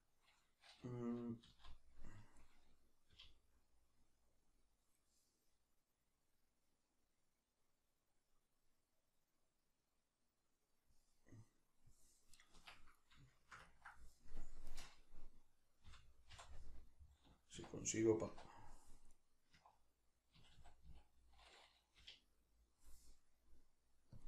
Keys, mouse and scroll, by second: 1.4 z, 12.4 right click, 12.6 Escape, 13.3-14.7 shift+middle drag, 14.7 right click, 15.8 l, 19.1 right click, 19.6 1.